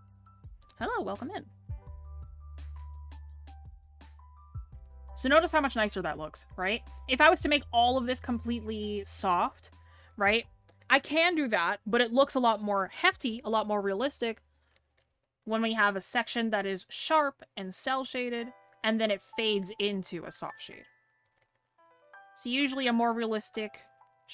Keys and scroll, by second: 10.1 scroll down 1, 10.9 scroll up 1.